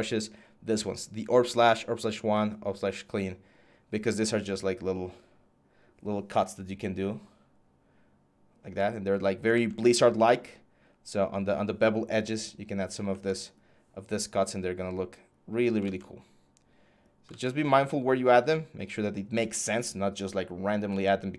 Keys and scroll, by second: 9.3 ctrl+z, 15.6 ctrl+z, 17.1 ctrl+z, 20.7 ctrl+z.